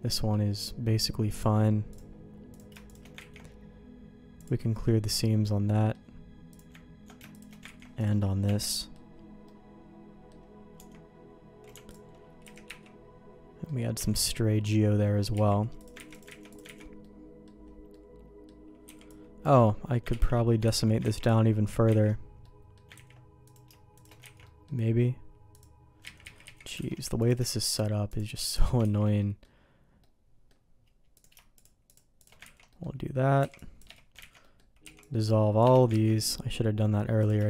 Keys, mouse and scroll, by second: 1.3 click, 1.8 click, 2.4 click, 2.8 shift+click, 3.3 ctrl+e, 4.8-5.9 middle drag, 6.4 click, 7.3 shift+click, 7.6 ctrl+e, 8.4 Tab, 8.7 middle click, 9.4 middle click, 10.7 Tab, 10.8 Tab, 11.8 alt+click, 12.4 a, 12.6 3, 13.6 middle click, 13.9 Tab, 15.3 z, 15.7 click, 16.0 ctrl+x, 16.2 ctrl+x, 16.4 click, 16.7 ctrl+x, 16.9 middle click, 17.8 middle click, 18.8 b, 20.0 ctrl+q, 20.7 ctrl+x, 21.0 ctrl+z, 21.9 ctrl+x, 22.4 middle click, 22.9 ctrl+z, 23.4 click, 23.9 shift+click, 24.3 ctrl+x, 24.4 middle click, 25.5 click, 26.2 ctrl+z, 26.4 ctrl+z, 26.7 alt+a, 27.1 click, 27.6 shift+click, 28.8 ctrl+x, 29.1 middle click, 29.9 middle click, 31.1 click, 31.5 click, 32.5 ctrl+x, 32.6 middle click, 33.3 c, 34.1 ctrl+x, 34.4 middle click, 34.8 c, 36.0 ctrl+x, 36.1 middle click, 37.1 click.